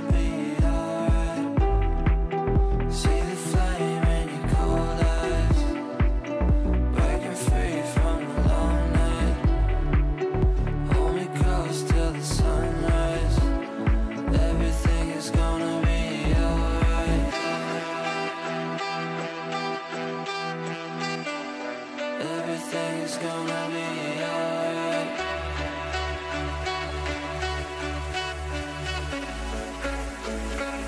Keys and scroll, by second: 2.2 ctrl+r, 25.2 c, 25.5 e.